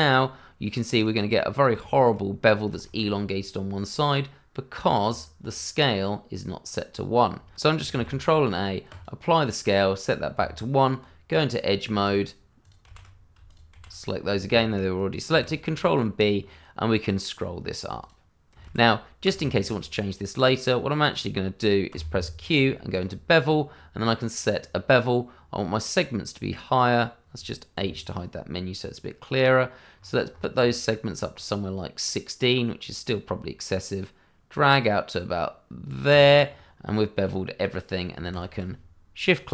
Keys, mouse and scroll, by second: 0.9 click, 1.2 middle click, 2.0 shift+middle click, 2.8 ctrl+z, 3.4 scroll down 1, 5.0 Tab, 7.9 ctrl+a, 8.9 click, 10.3 Tab, 11.3 click, 12.0 shift+click, 12.1 click, 12.8 shift+z, 13.4 shift+click, 13.5 click, 13.7 shift+z, 15.3 ctrl+b, 16.3 scroll up 1, 18.0 click, 18.6 ctrl+z, 19.4 Tab, 21.9 q, 22.9 click, 27.7 h, 29.9 scroll up 1, 31.2 scroll down 1, 36.1 click, 36.4-36.8 scroll down 1, 36.9 middle click, 38.3 click.